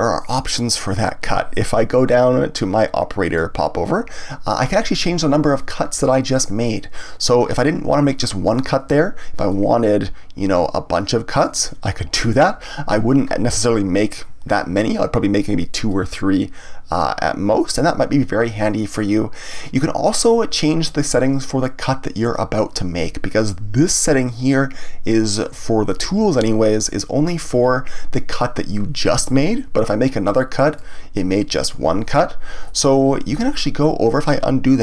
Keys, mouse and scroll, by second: 3.2 click, 9.4-12.5 drag, 15.8-18.9 drag, 30.7 click, 33.3 ctrl+z.